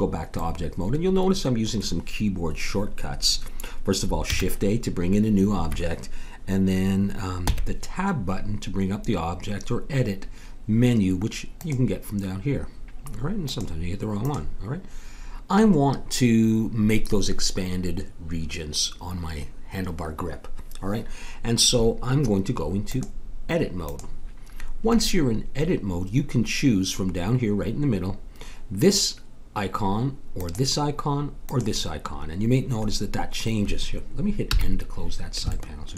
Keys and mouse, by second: 0.4 middle click, 4.3 shift+a, 7.4 Tab, 14.3-15.4 drag, 22.9-24.7 drag, 30.4-34.6 drag, 34.6 n.